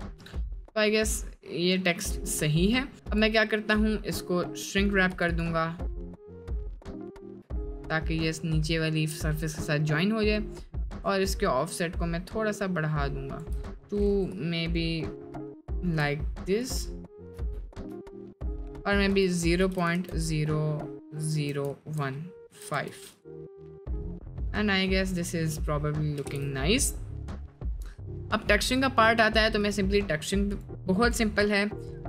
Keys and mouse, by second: 0.1 middle click, 0.4-0.9 middle drag, 1.5 middle drag, 2.1-2.6 middle drag, 3.5 middle click, 7.7 middle click, 8.3 middle drag, 9.1 middle click, 9.5 middle click, 10.1 middle click, 17.0 shift+middle drag, 17.7 shift+middle click, 23.5 middle drag, 24.2 middle drag, 25.2-25.7 middle drag, 26.4 ctrl+s, 26.6-27.0 middle drag, 30.0 middle click, 30.9-31.8 middle drag.